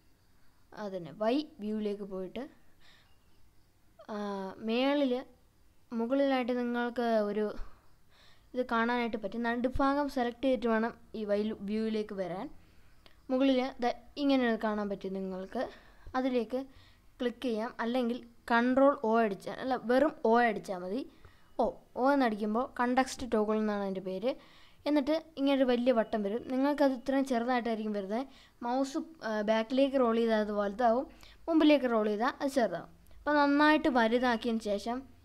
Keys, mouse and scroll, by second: 3.2-4.7 middle drag, 5.1-7.5 middle drag, 8.7 click, 9.8 scroll up 2, 18.7 o, 21.8 g, 25.0-25.4 scroll down 2, 25.7 scroll down 1, 28.5-29.0 scroll down 2, 29.2-31.5 scroll down 6, 31.5-32.2 scroll down 3, 34.5-35.1 scroll down 1, 34.5 z.